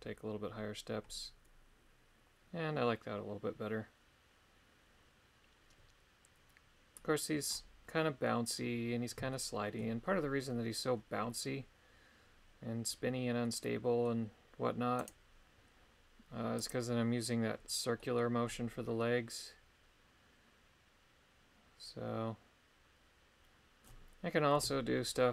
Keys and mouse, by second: 9.3 shift+middle click, 13.4 middle click, 15.0 right click, 16.6 click, 18.0 middle click, 24.6 KP_3.